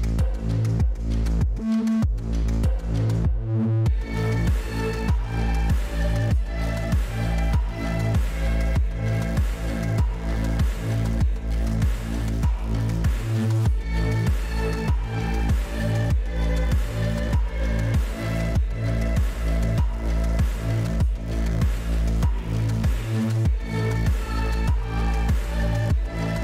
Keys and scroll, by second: 4.2-6.1 typing, 25.3-26.4 typing.